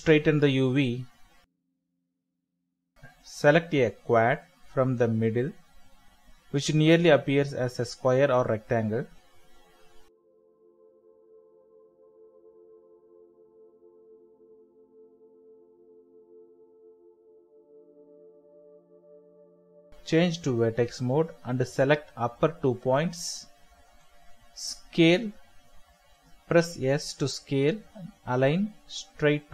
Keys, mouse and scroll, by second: 0.8-1.5 scroll up 1, 3.6 shift+middle click, 3.8 scroll up 1, 4.2 shift+middle click, 4.3 shift+scroll down 1, 4.4 scroll up 1, 4.7 shift+middle click, 8.2 typing, 10.2 Return, 12.0 typing, 13.6 Return, 14.7 typing, 15.8 Return, 16.9 typing, 17.7 Return, 21.2 typing, 23.3 Return, 24.3 typing, 27.1 Escape, 28.4 Return, 29.4 typing.